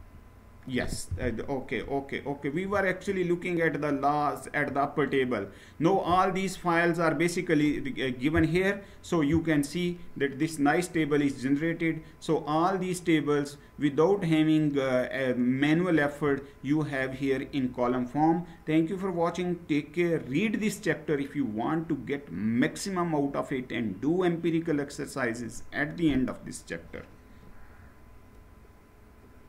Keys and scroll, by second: 10.7-15.5 Up, 16.2-17.3 Up, 17.8 Up.